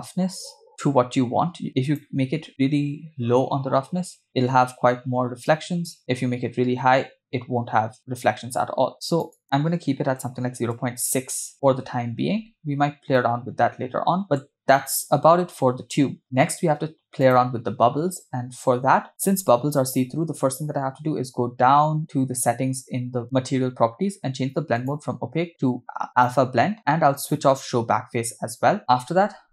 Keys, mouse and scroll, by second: 6.0-9.3 drag, 9.4-10.8 drag, 11.5 scroll down 1, 12.4 scroll up 1, 13.3-14.5 middle drag, 17.2 click, 20.7-21.1 scroll down 6, 21.7-24.1 scroll down 10, 24.8-26.3 drag, 27.4 click, 28.8 middle click.